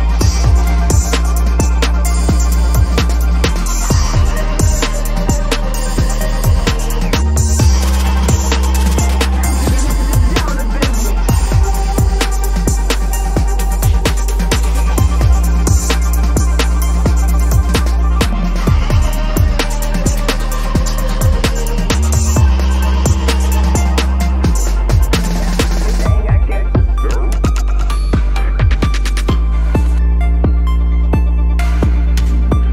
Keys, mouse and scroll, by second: 6.3 alt+shift+click, 6.9 double click, 9.5-9.8 scroll down 1, 11.2 space, 12.8 ctrl+-, 13.2 space, 14.2 typing, 16.2 typing, 17.0 alt+click, 17.2 space, 18.8 space, 20.2 alt+click, 20.5 space, 22.2 space, 23.2 right click, 26.3 double click, 31.8 space, 32.6 ctrl+`.